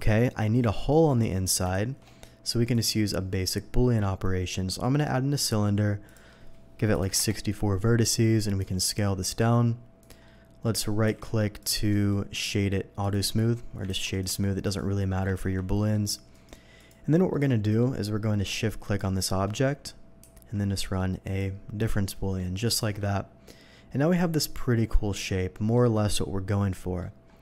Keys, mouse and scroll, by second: 1.2 scroll up 1, 1.7 shift+a, 2.7 click, 6.0 click, 7.0 4, 7.1 Return, 8.6 s, 10.0 click, 10.2 middle click, 11.2 z, 11.6 click, 11.6 s, 11.9 right click, 13.0 click, 13.8 ctrl+z, 14.1 ctrl+right click, 14.6 ctrl+click, 15.3 ctrl+z, 15.8 ctrl+middle click, 16.3 right click, 16.7 click, 17.3-17.8 middle drag, 18.8 click, 20.2 q, 21.2 click, 21.8-22.3 middle drag, 22.8 shift+2, 23.1-25.7 middle drag, 26.7 middle drag.